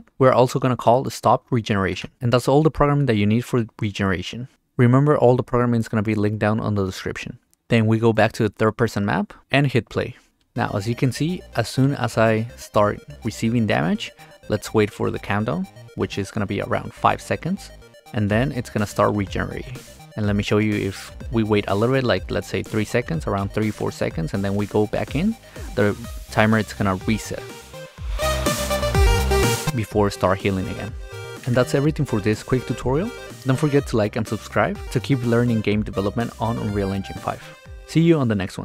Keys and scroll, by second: 0.1 r, 1.9 Return, 11.0 w, 11.4 d, 13.9 d, 14.3 s, 14.9 a, 19.1-22.1 typing, 24.9 d, 25.5 s, 26.0 a, 32.0 Escape.